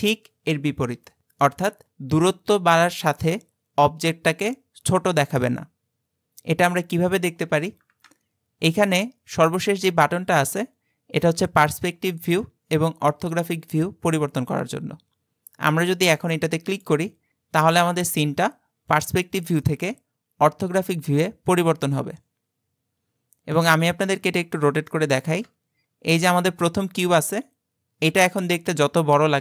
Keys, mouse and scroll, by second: 0.0-16.7 shift+middle drag, 16.7 click, 19.7-22.8 middle drag, 24.2-24.9 scroll up 4, 24.9-29.4 shift+middle drag.